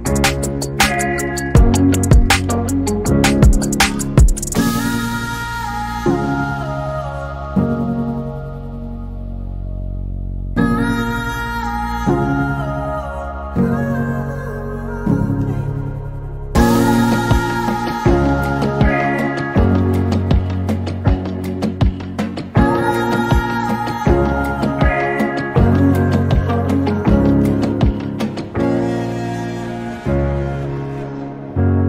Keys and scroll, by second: 6.5 r, 9.1-11.8 typing, 12.9-13.7 typing, 14.7-15.4 typing, 17.8 a, 22.4 m, 24.4-26.1 typing, 27.7-30.7 typing.